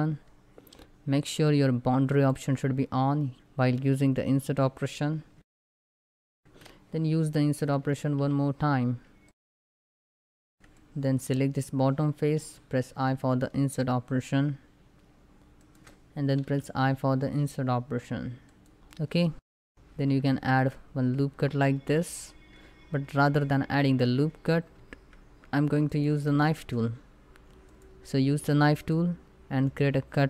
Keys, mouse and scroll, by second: 1.8 shift+click, 6.1 o, 7.6 i, 9.0 click, 9.2 Tab, 9.4-9.9 scroll down 2, 9.5 middle click, 9.9 middle click, 10.2 click, 10.2 Tab, 10.3 shift+middle click, 10.4 3, 10.5 click, 15.3 shift+click, 18.2 click, 19.1 middle click, 19.4-19.8 scroll up 3, 19.4 middle click, 19.9 ctrl+r, 20.3 ctrl+click, 24.0 ctrl+click, 24.4 ctrl+z, 25.5 click, 26.1 shift+middle click, 27.3 click.